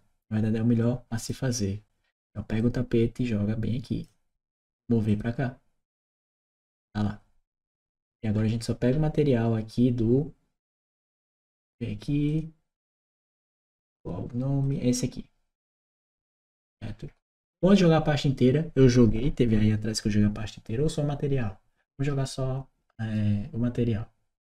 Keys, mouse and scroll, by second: 0.9 click, 2.3-3.8 drag, 4.9 click, 6.1 click, 12.1 click, 13.2 click, 14.4 click, 21.6-24.3 drag.